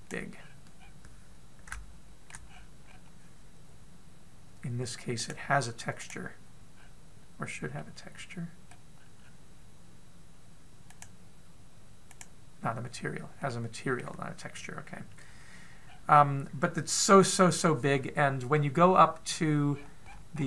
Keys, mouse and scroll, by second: 1.0-1.4 scroll up 3, 1.4-2.3 scroll down 5, 2.3 shift+middle click, 3.1-3.7 scroll up 3, 5.7 click, 7.3-8.4 scroll up 1, 8.4 middle click, 8.4 scroll up 2, 9.8-10.1 scroll up 1, 11.5 click, 14.0 middle click, 16.4-17.2 scroll down 1, 17.2 scroll down 3, 18.4-19.7 scroll up 2, 20.3-20.4 scroll up 21.